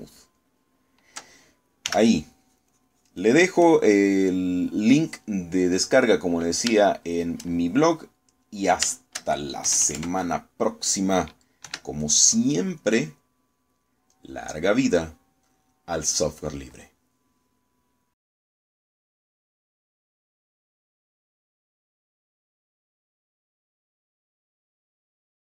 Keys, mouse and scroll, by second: 0.7 ctrl+z, 2.9 s, 3.5-5.0 drag, 5.9 middle click, 7.0 middle click, 7.9 shift+middle click, 8.7 shift+middle click, 10.0 shift+middle click, 10.7 KP_Add, 12.7 4, 13.9 click, 14.5 click, 15.4 click, 20.5-25.5 drag.